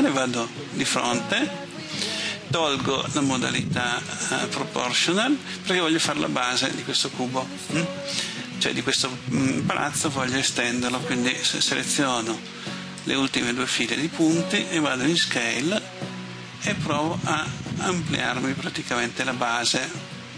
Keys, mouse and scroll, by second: 0.2 KP_1, 3.2 click, 12.5 b, 13.1-14.7 drag, 15.2 s.